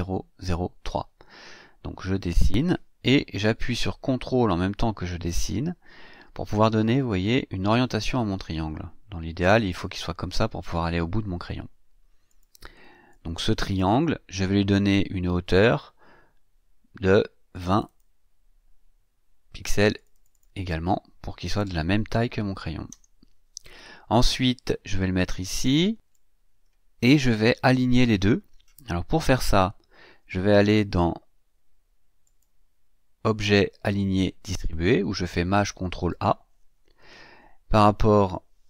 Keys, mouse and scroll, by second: 5.2-10.5 ctrl+drag, 12.3 click, 13.1-13.9 drag, 17.5 click, 19.9 click, 21.4 KP_2, 21.6 KP_0, 22.9 KP_Enter, 24.3-26.3 drag, 32.2 click, 36.0 click.